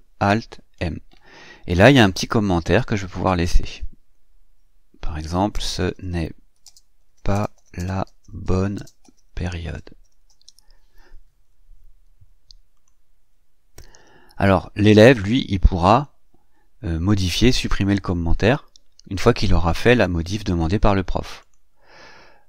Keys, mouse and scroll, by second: 0.5 ctrl+alt+m, 4.7-10.8 typing, 12.6 click, 15.7 click, 21.2 click.